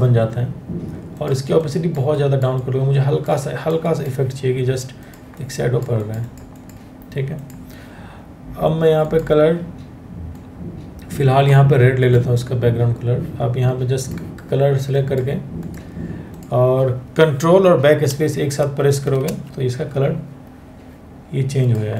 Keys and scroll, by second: 18.6 ctrl+BackSpace.